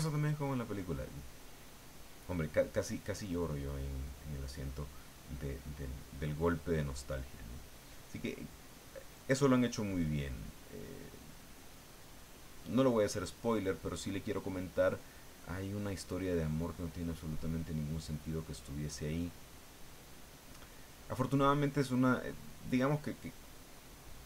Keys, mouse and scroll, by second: 13.1 click, 14.3 click, 15.2 click, 15.7-17.5 drag, 17.6-22.0 drag, 23.9 middle click.